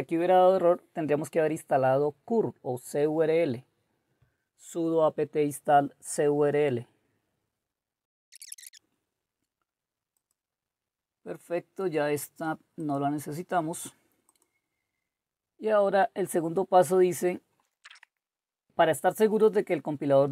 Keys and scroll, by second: 5.1 typing, 17.8 ctrl++, 17.9 ctrl++.